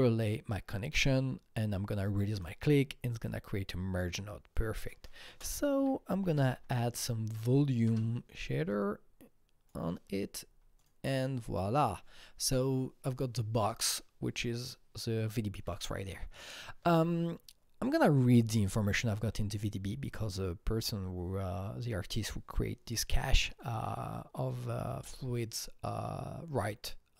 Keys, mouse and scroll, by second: 3.5 Delete, 5.2 ctrl+space, 5.5-7.0 typing, 7.2 Down, 7.8 Return, 8.7-13.4 drag, 13.6-16.2 drag.